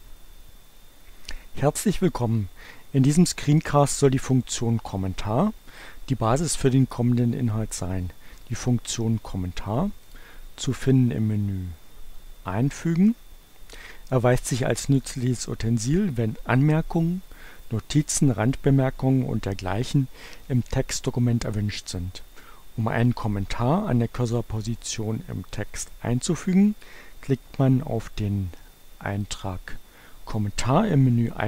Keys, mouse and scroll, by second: 10.1 click, 18.0 click, 29.2 click.